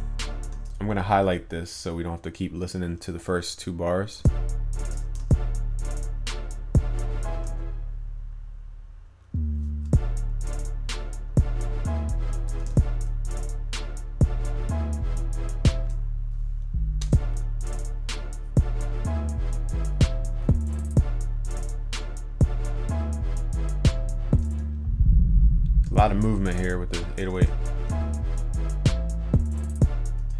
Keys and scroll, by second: 27.4 ctrl+s.